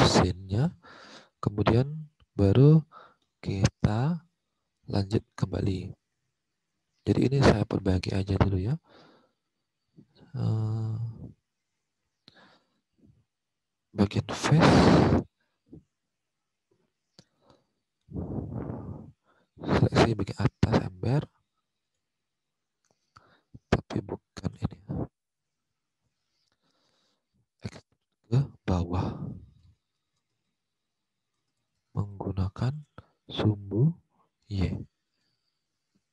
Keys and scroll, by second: 5.0 alt+Tab, 24.4 Return, 25.4 Return, 27.5-34.0 typing.